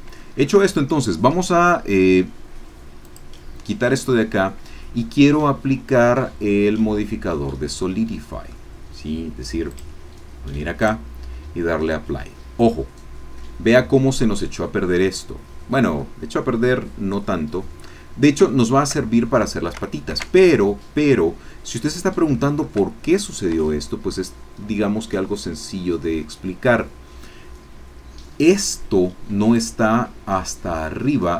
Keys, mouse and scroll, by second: 0.2 shift+click, 3.0 click, 5.8-6.2 scroll down 2, 6.2-8.7 middle drag, 9.7 click, 10.8 click, 11.9-17.8 drag, 17.8 middle click, 18.5-19.7 shift+drag, 22.3 shift+click, 22.8 shift+click, 23.6 Tab, 23.9-27.3 drag, 29.6 click.